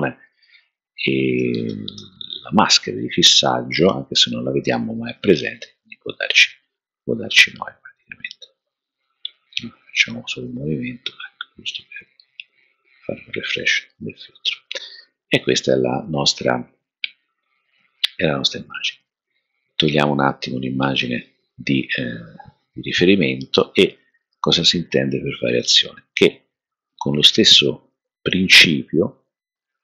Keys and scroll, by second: 1.3-1.9 typing, 4.1 BackSpace, 4.2 BackSpace, 4.5 BackSpace.